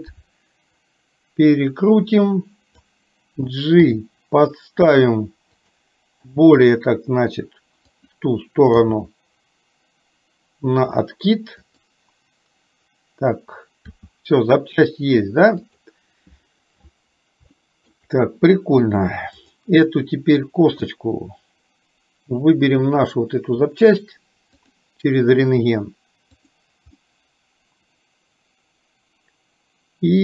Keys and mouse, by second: 0.9-2.9 drag, 3.9 g, 6.4 r, 8.9 g, 14.0 r, 17.6 shift+middle click, 19.5 click, 20.9-23.9 middle drag, 26.5 click, 27.0-30.2 middle drag.